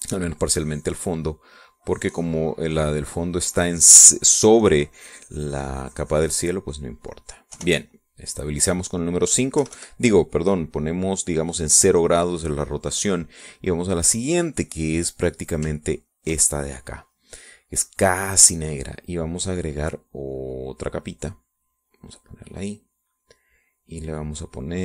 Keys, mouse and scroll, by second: 0.9 click, 1.6 click, 2.8-4.9 drag, 5.1 click, 5.9-7.6 drag, 7.8 click, 8.5 5, 8.8 click, 9.5 click, 9.6 middle click, 9.9 click, 9.9 middle click, 10.0 click, 10.5 -, 11.7 click, 13.7-15.0 drag, 15.9 click, 17.0 ctrl+click, 17.6 ctrl+click, 18.8 click, 21.3 click, 22.0 click, 22.9 click, 23.5 click, 24.7 click.